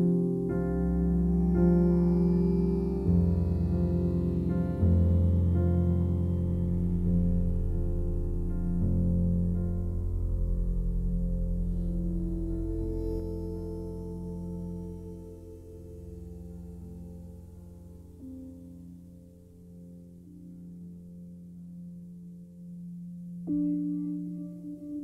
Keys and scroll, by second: 0.9 alt+r, 1.4 Delete, 2.5 alt+r, 2.8 Delete, 7.5 ctrl+i, 9.8 alt+r, 12.0 alt+r, 12.8 alt+r, 13.0 Delete, 19.2 ctrl+i, 19.3 Delete, 22.2 alt+r, 22.5 Delete, 24.3 Delete.